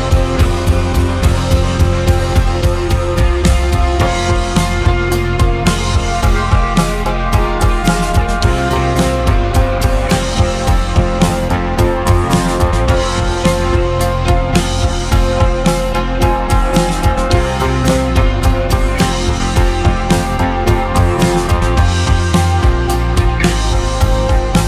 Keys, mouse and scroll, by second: 1.2-1.5 scroll down 2, 1.5 scroll up 2, 3.9-6.3 drag, 7.5 click, 8.2 s, 10.6 g, 13.3-14.0 scroll up 6, 14.0-14.7 shift+middle drag, 14.7 Tab, 15.7-16.5 scroll down 7, 16.5 click, 17.2 1, 18.6 click, 19.2 click, 21.8 ctrl+r, 23.5 ctrl+r.